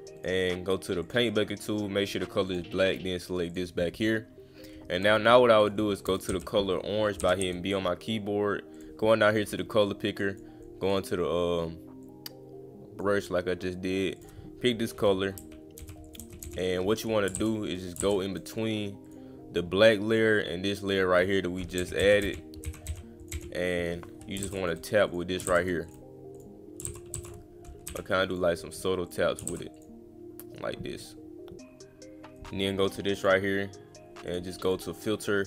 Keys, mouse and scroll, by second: 0.2 click, 1.0 click, 2.5 click, 3.5 click, 5.6 click, 8.7 click, 9.8 click, 10.6 click, 12.0 click, 14.2 click, 16.1 click, 16.5 click, 19.1 click, 20.1 click, 20.9 click, 23.2 click, 24.6 click, 25.1 click, 25.8 click, 26.3 click, 26.8 ctrl+z, 27.2 ctrl+z, 28.3 click, 29.1 click, 29.8 click, 32.4 click, 33.2 click, 34.3 click, 34.6 click.